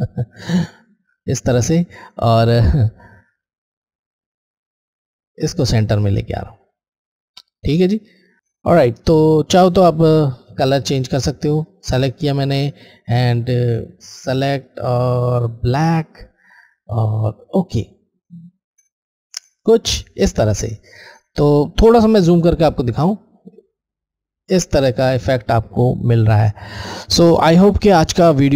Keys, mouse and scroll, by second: 2.1 alt+Left, 4.8 alt+Left, 11.6 alt+click, 20.6 alt+click, 22.1-22.6 scroll, 23.7-24.7 scroll, 25.1 click.